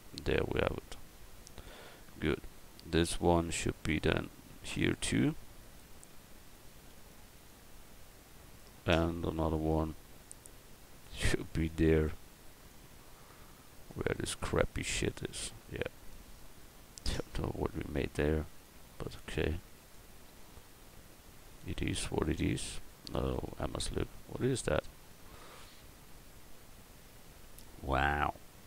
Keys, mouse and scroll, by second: 0.3-1.6 middle drag, 1.6 a, 2.2 middle click, 2.4 Tab, 6.7 shift+d, 7.4-9.0 drag, 9.0 middle click, 9.6 shift+d, 11.1-12.6 drag, 13.1-16.4 drag, 16.4-17.9 middle drag, 17.9-19.2 drag, 19.2 right click, 20.1 click, 20.3 middle click, 20.8 middle click, 23.5 Tab, 23.9 middle click, 24.3 middle click.